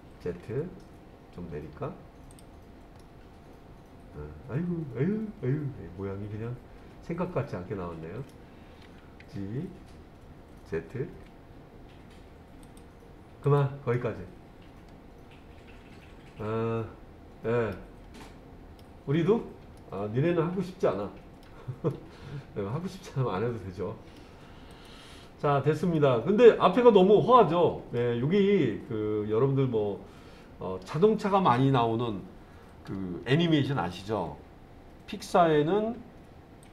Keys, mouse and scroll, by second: 0.2 z, 2.3 click, 3.0-8.3 middle drag, 9.2 g, 11.1 z, 12.6 click, 13.4 click, 13.9-17.7 middle drag, 18.2 middle click, 19.8-21.4 middle drag, 21.9-24.2 middle drag, 24.7 click, 25.9-28.0 middle drag.